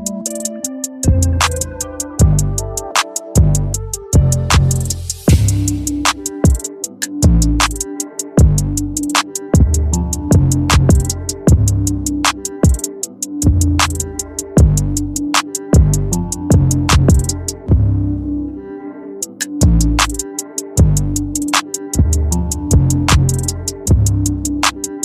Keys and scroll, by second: 7.6 ctrl+j, 19.0 space, 19.9 space.